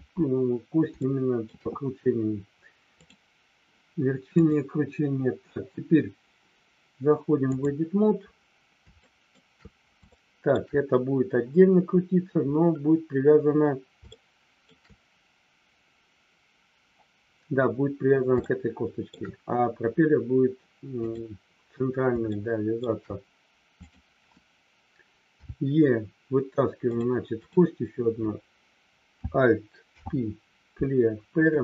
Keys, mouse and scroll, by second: 0.9 shift+middle click, 2.9 click, 4.3-7.7 drag, 8.9 shift+middle click, 10.1 shift+middle click, 14.1 shift+middle click, 18.5 shift+middle click, 20.9 click, 22.3 shift+middle click, 23.8 click, 26.8 click, 29.8 alt+p.